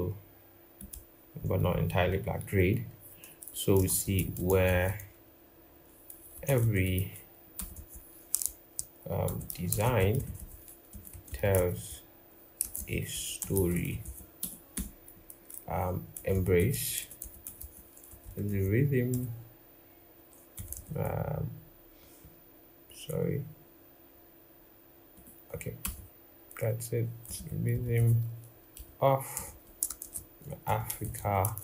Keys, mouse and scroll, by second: 3.5-4.2 typing, 6.2-6.6 typing, 13.2-13.7 typing, 14.5 Return, 15.9-18.8 typing, 20.3 typing, 29.3 Return, 29.8-31.2 typing.